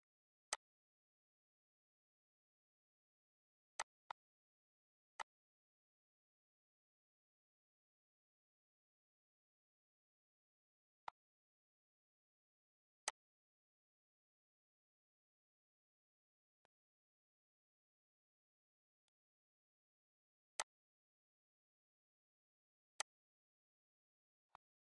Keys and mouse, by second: 2.0 click, 3.4 click, 10.4 click, 11.5 o, 12.5 click, 15.3 click, 16.5 click, 17.4-18.6 typing, 18.9 click, 20.4 click, 22.4 click, 24.4 click.